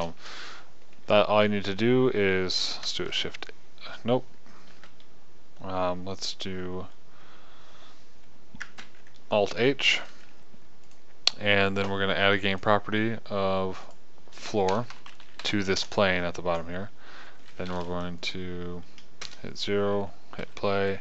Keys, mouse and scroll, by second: 0.0 p, 0.9 KP_0, 3.7 shift+h, 5.3 ctrl+z, 9.2 alt+h, 18.7 right click, 19.6 KP_0, 20.9 p.